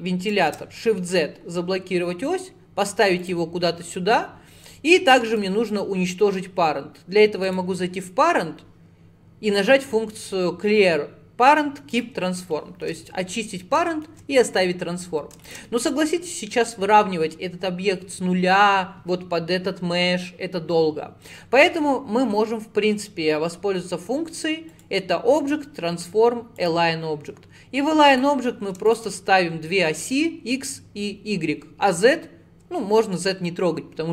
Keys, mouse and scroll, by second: 4.1-5.3 scroll up 1, 5.3-12.6 right drag, 12.6 shift+middle click, 13.5-13.9 scroll up 4, 13.9 shift+middle click, 14.4-15.5 scroll up 1, 15.5 shift+click, 24.7-27.8 drag, 28.2 click, 29.0 shift+click.